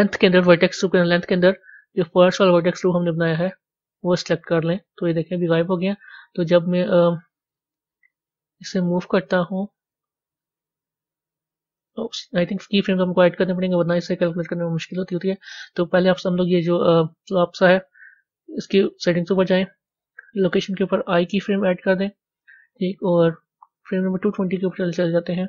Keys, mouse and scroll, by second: 3.3-7.2 drag, 7.2 scroll down 1, 8.2 click, 14.5-16.8 drag, 23.7-25.4 drag.